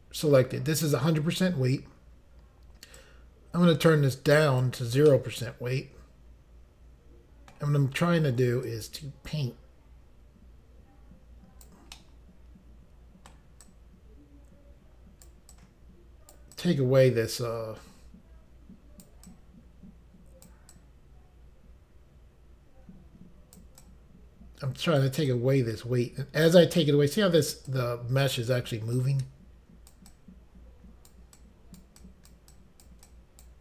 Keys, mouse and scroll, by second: 3.0 click, 5.1 middle click, 8.7 click, 11.9 middle click, 13.6 click, 15.5 click, 16.5 click, 19.3 click, 20.7 click, 23.8 click, 25.3 click, 27.7 click, 28.9 click, 30.1 click, 31.4 click, 32.0 click, 32.5 click, 33.1 click.